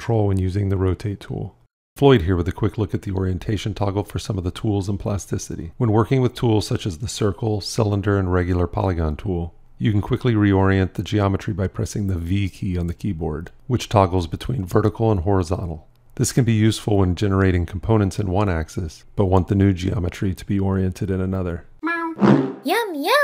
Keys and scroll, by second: 12.1 v.